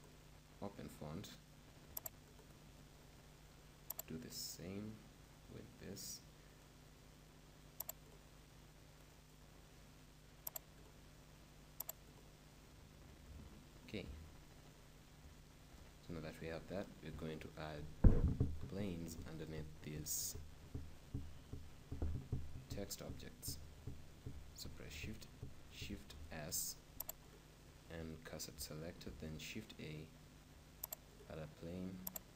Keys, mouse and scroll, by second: 2.1-3.9 drag, 2.7-4.5 right drag, 4.0-5.9 drag, 9.2-11.0 right drag, 10.6-13.6 drag, 14.5-16.4 middle drag, 17.1 middle click, 22.4-24.3 middle drag, 24.8 shift+a, 26.0 shift+s, 28.9 shift+a, 32.2-32.3 drag.